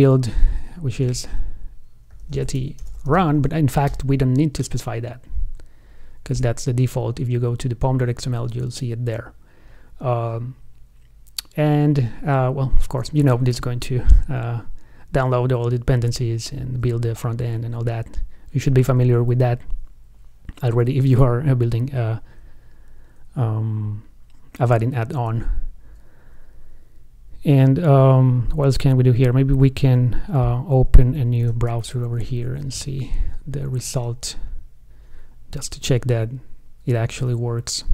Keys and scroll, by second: 31.8 alt+shift+super+w.